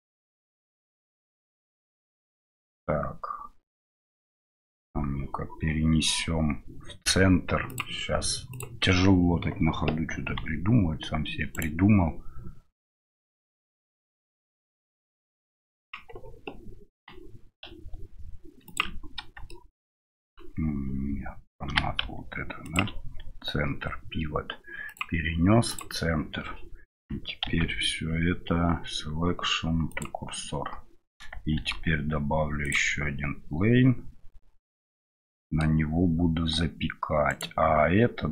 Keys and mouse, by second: 7.7-8.8 drag, 10.2 g, 16.9 g, 21.7 g, 24.9-26.0 drag, 27.4 shift+s, 31.5 shift+a, 35.1-35.7 middle drag, 37.3 right click.